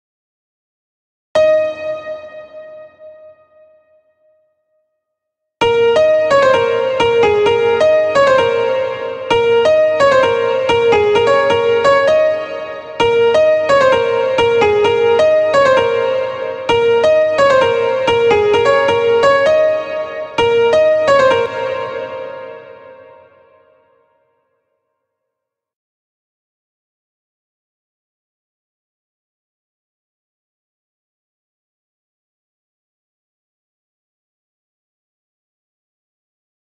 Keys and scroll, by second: 20.8 space, 33.9 ctrl+a, 35.6 ctrl+c.